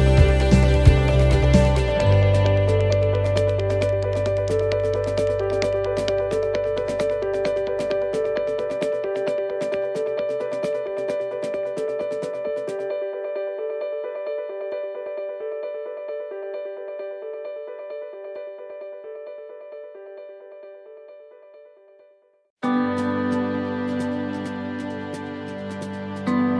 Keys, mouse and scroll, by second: 1.3 middle click, 2.8 right click, 3.2 alt+shift+right click, 3.8 right click, 5.2 s, 7.1 middle click, 8.9 middle click, 8.9 click, 11.1 middle click, 12.0 ctrl+z, 12.6 ctrl+z, 13.2 alt+shift+right click, 14.1 alt+shift+right click, 14.6 alt+shift+right click, 15.3 ctrl+z, 15.8 ctrl+z, 16.3 alt+shift+right click, 17.3 scroll up 3, 17.9 shift+middle click, 19.0 scroll up 2, 20.1 alt+shift+right click, 21.3 ctrl+z, 22.1 alt+shift+right click, 22.9-23.5 scroll down 4, 24.2 s.